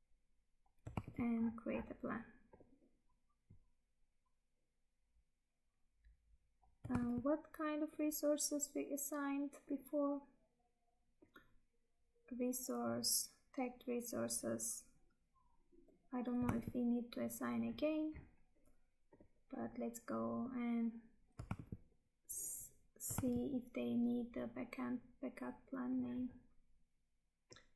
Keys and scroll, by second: 1.0 Tab, 7.0 Tab, 16.6 Tab, 21.6 Tab, 23.2 Tab.